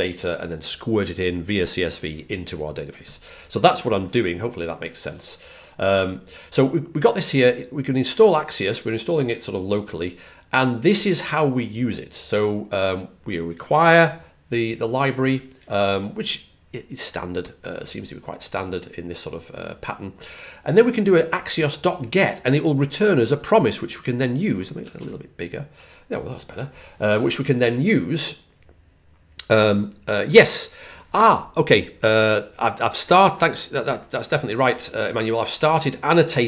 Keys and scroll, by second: 24.8 super+=.